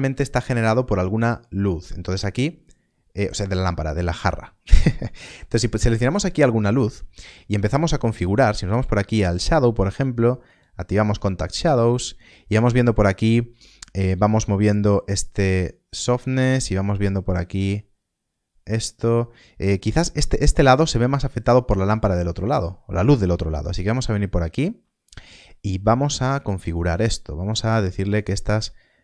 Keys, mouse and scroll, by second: 0.5 scroll down 1, 8.0-10.1 scroll down 1, 10.4 middle click, 10.6 click, 13.9 click, 22.3 click, 26.0 middle click, 27.7 click.